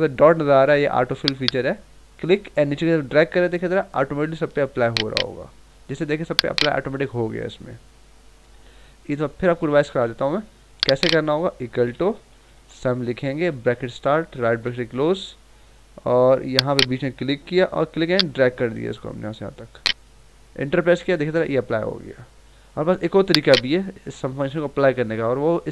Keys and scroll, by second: 9.9 ctrl+z.